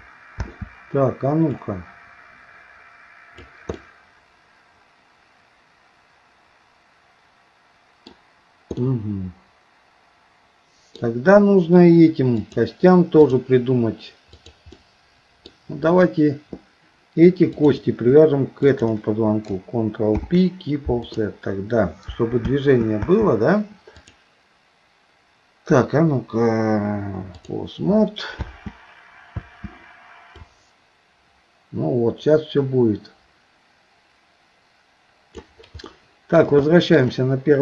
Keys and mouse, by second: 0.4 space, 1.6-3.5 drag, 3.8-8.1 middle drag, 8.8-11.0 middle drag, 12.4-13.5 drag, 14.3 click, 17.6 shift+click, 18.6 shift+click, 20.1 ctrl+p, 22.5 space, 23.1 space, 24.0-27.6 drag, 28.4 space, 29.4 space, 30.5-35.5 drag, 35.9 middle click, 36.7 shift+middle click.